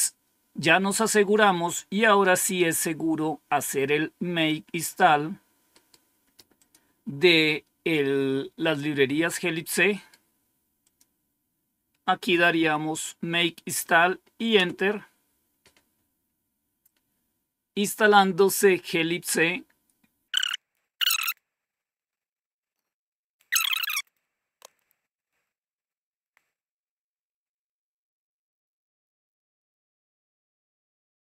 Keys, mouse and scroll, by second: 2.6-4.7 drag, 5.6 right click, 6.5 click, 8.5 click, 9.8 right click, 10.7 click, 12.5 Tab, 12.7 Right, 14.4 Return.